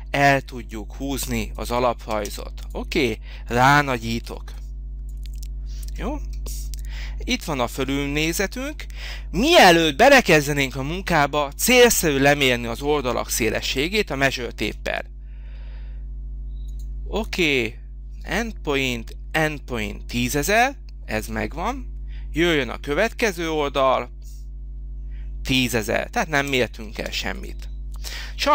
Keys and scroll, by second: 2.1 space, 4.3 h, 14.6 t, 21.2 Escape, 26.3 Escape, 26.9 space.